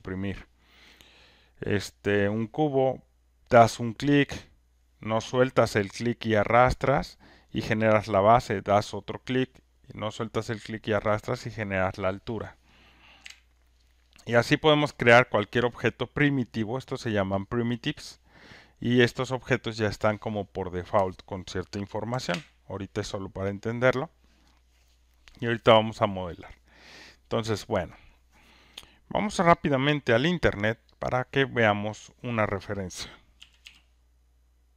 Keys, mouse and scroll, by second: 1.5 click, 6.4 click, 8.0 click, 11.1 click, 13.2 Delete, 15.0 click, 17.1 click, 18.0 click, 22.1 Delete, 22.3 Delete, 29.7 click, 31.0 click, 32.0 click, 33.1-34.7 typing.